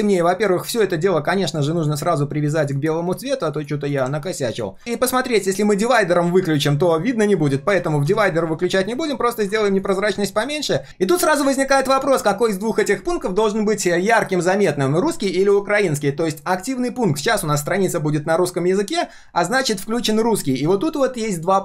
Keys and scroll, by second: 7.7 ctrl+z, 8.1 ctrl+z.